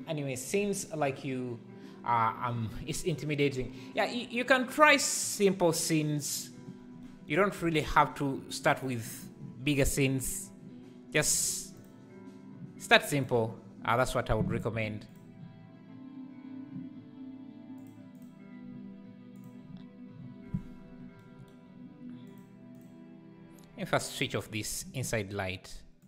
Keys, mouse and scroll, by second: 8.9 click, 11.8 click, 13.3 click, 15.1 click, 17.8 click, 18.1 click, 22.4 click, 22.8 click.